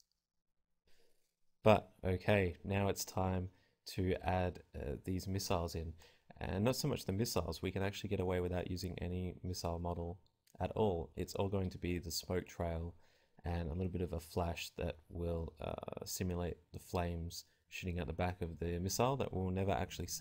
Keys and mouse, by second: 0.6 Tab.